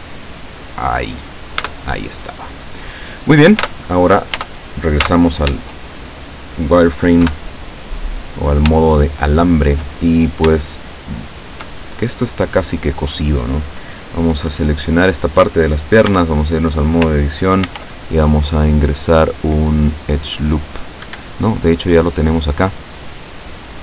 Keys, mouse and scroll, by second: 0.6 click, 1.7 Tab, 2.0-2.7 scroll down 2, 2.9-3.3 scroll up 1, 3.7 Tab, 4.4 Tab, 5.1 z, 7.4 KP_7, 8.3-8.6 scroll up 2, 9.0-10.0 shift+middle drag, 10.7-11.6 shift+middle drag, 15.0 right click, 16.2 Tab, 17.8 ctrl+r, 21.2 Escape.